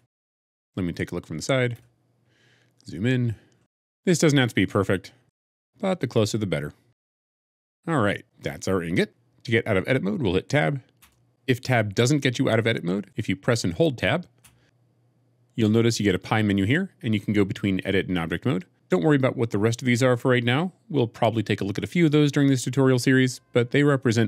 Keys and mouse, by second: 1.7 KP_1, 5.2 g, 5.3 z, 7.1 middle click, 7.4 middle click, 7.6-9.0 middle drag, 9.0 Tab, 10.9 Tab, 14.3-14.7 Tab.